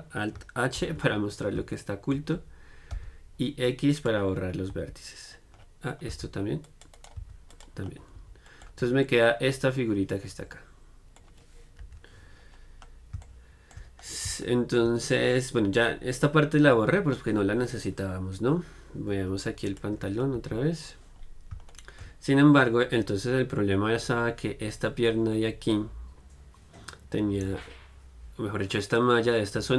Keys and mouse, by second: 1.0 alt+h, 1.0-3.1 middle drag, 3.1 x, 4.9-7.2 middle drag, 4.9 z, 6.3 c, 7.2-8.7 right drag, 7.4 x, 8.4 Tab, 8.7 middle click, 8.9 z, 10.0 middle click, 11.0-12.0 middle drag, 12.0 KP_1, 19.9-21.7 drag, 21.7-29.7 middle drag.